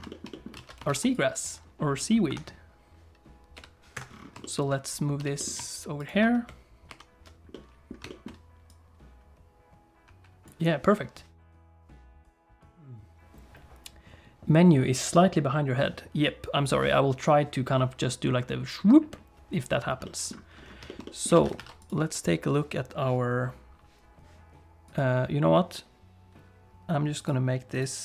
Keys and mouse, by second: 0.1 shift+middle click, 0.3 middle click, 0.6 alt+a, 0.9 ctrl+s, 1.2 click, 2.3 KP_7, 3.5 g, 4.4 shift+click, 5.2 g, 6.9 alt+h, 7.5 middle click, 8.1 shift+middle click, 8.7-10.5 drag, 20.0 middle click, 20.9 shift+middle click, 21.0 middle click, 21.3 alt+a, 21.6 ctrl+s, 24.9 click, 27.2-28.0 drag.